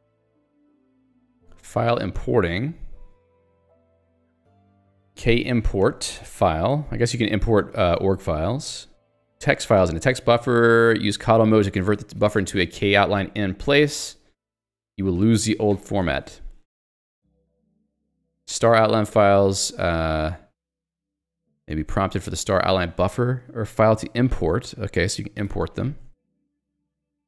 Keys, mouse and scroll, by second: 5.1 alt+x, 5.1-6.3 typing, 7.7 ctrl+g, 8.2 Escape, 8.8 j, 18.3 k, 19.5 j, 19.9 l, 21.8 j, 22.2 h, 26.2 j.